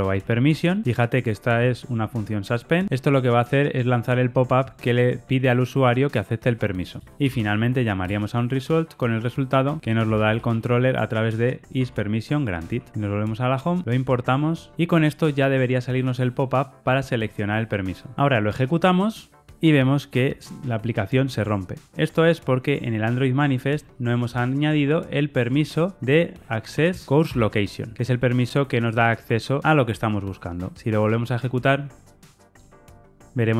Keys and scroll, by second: 0.0 Return, 0.8 Tab, 8.0 Return, 25.4 Tab, 27.2 Return, 29.6 ctrl+r, 29.6 shift+F10.